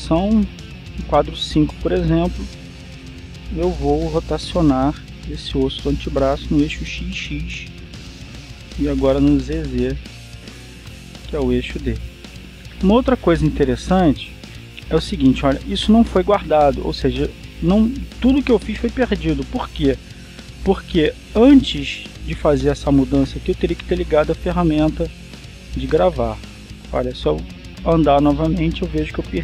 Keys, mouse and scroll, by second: 1.2-2.6 drag, 3.1 right click, 5.1 r, 5.8 x, 7.9 click, 9.1 r, 9.7 z, 11.8 click, 27.9-29.4 drag.